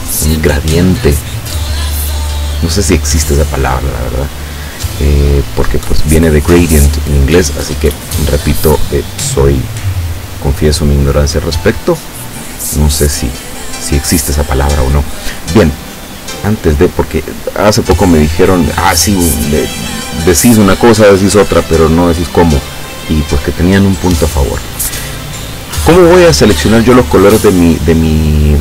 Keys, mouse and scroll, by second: 2.4 click, 5.7-7.1 drag, 8.2-10.1 drag, 11.5 click, 16.3 click.